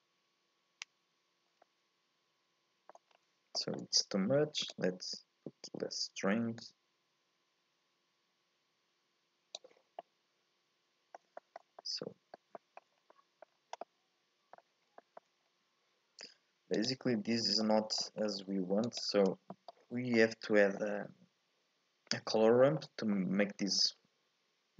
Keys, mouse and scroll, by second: 1.6-3.1 middle drag, 3.1 scroll up 1, 3.6-4.7 shift+middle drag, 4.7-7.7 drag, 10.0-13.0 middle drag, 13.0 scroll up 1, 13.1 middle click, 13.5 scroll down 2, 13.8-14.8 middle drag, 14.8 scroll down 1, 15.0 shift+middle click, 15.4-15.7 scroll up 1, 16.8 ctrl+shift+click, 17.6 middle click, 18.2-18.6 scroll up 3, 18.9 ctrl+shift+click, 19.5 middle click, 19.9 scroll up 2, 20.1-22.3 middle drag, 22.3-22.6 scroll down 2, 22.6 shift+middle click, 22.9 scroll up 1, 23.1-24.7 middle drag.